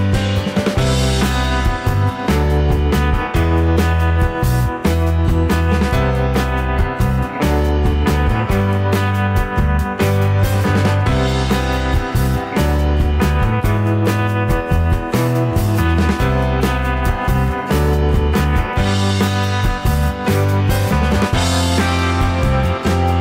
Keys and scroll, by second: 13.9 Return, 20.7 ctrl+t.